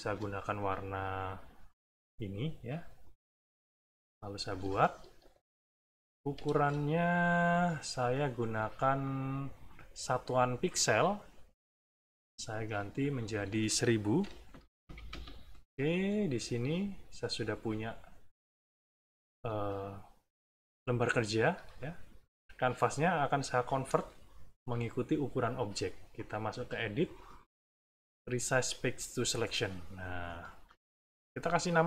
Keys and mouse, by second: 1.6 click, 4.3-6.3 ctrl+drag, 6.5 ctrl+space, 7.5 click, 7.9 click, 9.0-10.9 drag, 11.6 click, 12.5 click, 13.0 click, 14.2 KP_1, 14.4 KP_0, 15.0 KP_Enter, 16.3 middle click, 18.1 middle click, 18.8 click, 21.1 middle click, 21.7 click, 26.1-28.8 drag, 29.9 middle click, 30.6 click, 31.6 click.